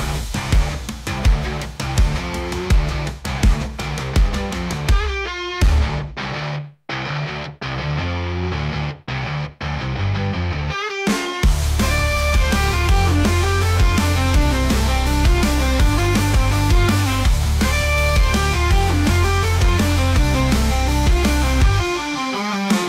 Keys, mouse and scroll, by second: 0.3-1.1 scroll down 11, 1.1-1.4 middle drag, 1.4 right click, 2.4 click, 2.6-3.1 scroll down 2, 3.1-3.5 drag, 3.8 scroll up 2, 4.0-5.6 shift+middle drag, 8.4-9.1 scroll up 1, 9.1-10.6 drag, 11.3 s, 14.3 g, 17.2 r, 21.2-22.7 drag.